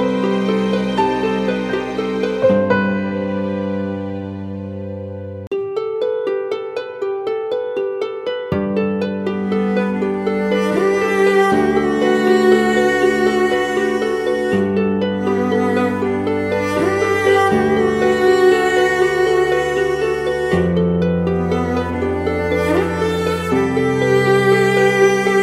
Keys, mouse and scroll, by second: 7.8 ctrl+t, 16.0 alt+shift+click, 20.2 Return, 21.7-24.2 scroll down 1.